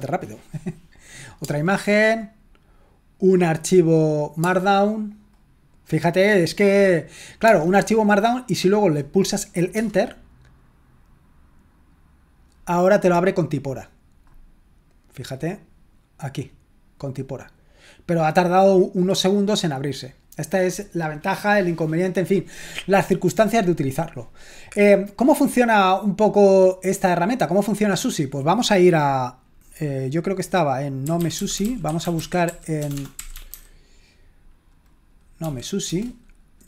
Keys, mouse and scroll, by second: 1.1 click, 1.9 click, 3.1-4.8 drag, 6.4 click, 9.9 Return, 15.3-16.4 drag, 18.5 click, 25.1 click, 27.0-31.0 drag, 30.8-34.0 typing, 35.4 typing, 35.8 Return.